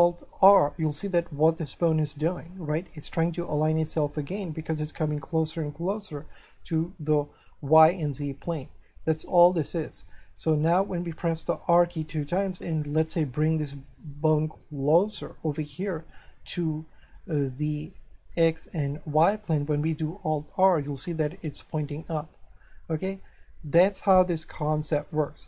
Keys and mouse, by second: 0.4 alt+r, 2.1 middle click, 8.7 shift+middle click, 10.2 middle click, 12.2 r, 15.0 click, 15.4 middle click, 20.3 alt+r, 24.5 middle click.